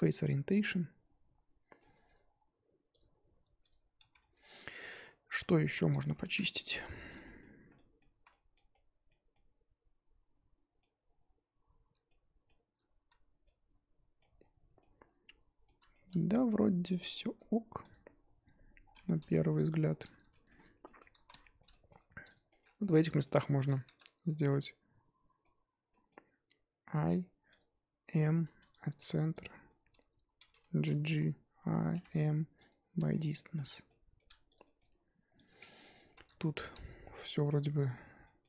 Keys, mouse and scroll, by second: 0.1 scroll down 2, 0.2-1.9 middle drag, 1.9-2.2 scroll up 1, 3.6-4.1 drag, 4.1 z, 4.2 middle click, 4.4 scroll up 1, 4.6 Tab, 5.9 alt+h, 6.3 click, 6.9-7.5 shift+middle drag, 7.5 scroll up 1, 7.7-8.2 middle drag, 8.2 z, 8.3-11.3 middle drag, 11.3-12.0 scroll down 2, 12.0-13.0 shift+middle drag, 13.0 z, 13.4 middle click, 14.4-14.8 scroll down 3, 14.8-16.1 middle drag, 16.1-16.9 scroll up 1, 16.9-17.2 scroll down 1, 17.2 Tab, 17.9 click, 18.0-18.8 scroll down 1, 18.8 scroll down 3, 19.2 KP_1, 19.8-20.3 scroll down 4, 20.3 shift+middle drag, 20.5 scroll up 1, 20.8-21.2 middle drag, 21.2 z, 21.4-21.9 shift+middle drag, 21.9-22.3 scroll up 1, 22.3 click, 22.5 shift+middle drag, 22.7 scroll up 2, 22.8 Tab, 23.2 shift+middle click, 24.0 click, 24.4-26.8 middle drag, 26.8 i, 28.7 m, 29.0 1, 29.4 click, 30.4 g, 31.1 a, 32.6 m, 32.9 Tab, 33.1 scroll down 1, 33.3-34.5 middle drag, 34.5 click, 34.6 middle drag, 34.9-35.4 scroll up 1, 35.4 click, 35.6 Tab, 35.9 scroll up 1, 36.0 z, 36.4-37.8 shift+middle drag, 37.8 z, 38.2 middle click.